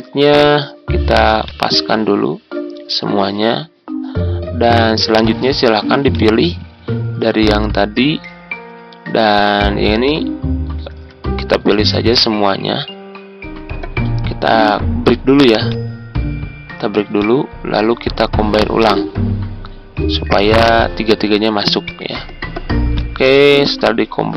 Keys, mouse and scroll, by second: 6.0 shift+click, 9.3 click, 10.8 ctrl+z, 11.6 shift+click, 15.6 click.